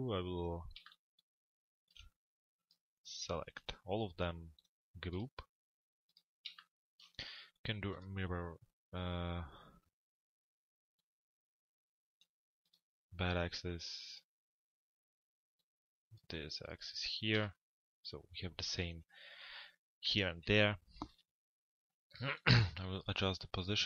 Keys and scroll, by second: 19.8 f, 20.4 z.